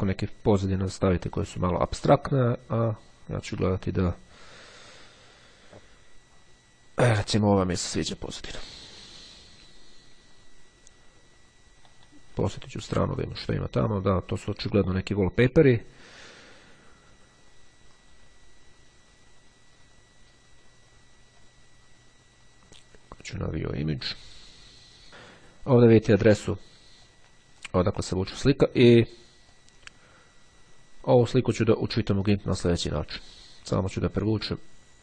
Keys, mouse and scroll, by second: 0.7-1.7 scroll down 1, 3.1-4.2 scroll down 1, 4.3-6.3 scroll down 1, 8.7-10.2 drag, 11.9 middle click, 13.3 click, 18.1-18.6 scroll down 1, 19.1-19.6 scroll down 1, 21.5 click, 23.5 click, 25.1 click, 26.4 click, 29.5-32.2 drag, 32.5 click, 33.9-35.0 drag.